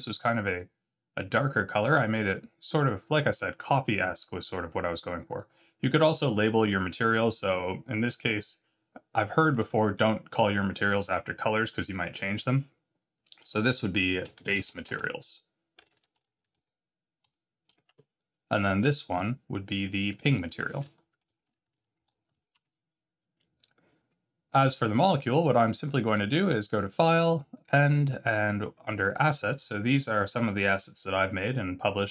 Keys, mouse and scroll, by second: 3.2 click, 4.1 click, 7.9 click, 9.5 click, 9.7 click, 19.1 click, 20.0 click, 20.2 click, 23.5 click.